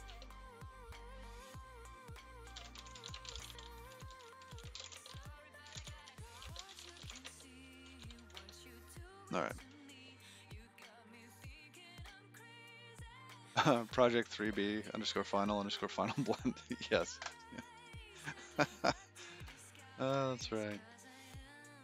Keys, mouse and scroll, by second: 18.7 click.